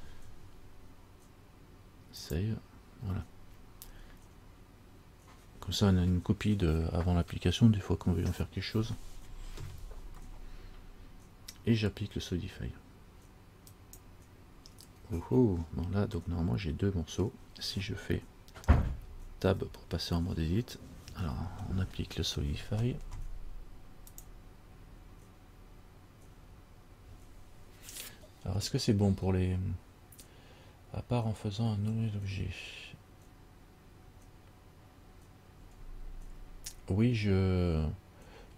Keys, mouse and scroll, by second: 2.7 click, 13.9 click, 15.8-16.4 scroll down 3, 16.4 middle click, 19.7 Tab.